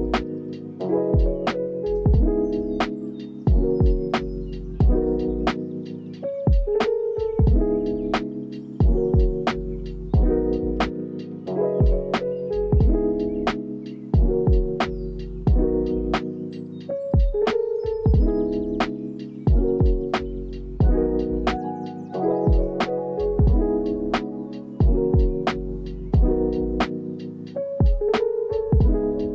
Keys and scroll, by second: 2.9 r, 4.0 space, 5.2 y, 9.1 v, 10.1 y, 16.9 ctrl+s, 19.2 u, 19.7 ctrl+s, 21.5 ctrl+c, 22.6 ctrl+v, 23.2 ctrl+v, 23.6 ctrl+s, 24.3 space, 26.4 space, 27.4 ctrl+s.